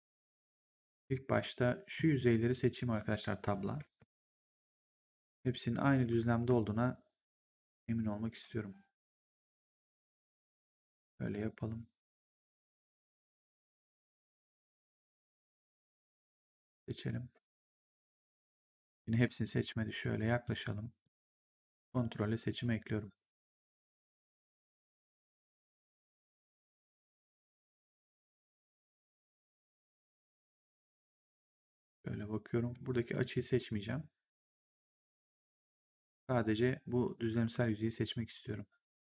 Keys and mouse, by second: 0.8 right click, 1.9 click, 3.9 Tab, 4.5 click, 6.7 Tab, 6.7 click, 17.4 Tab, 20.9 click, 23.6 click, 25.6 click, 27.8 click, 33.0 click, 35.5 click.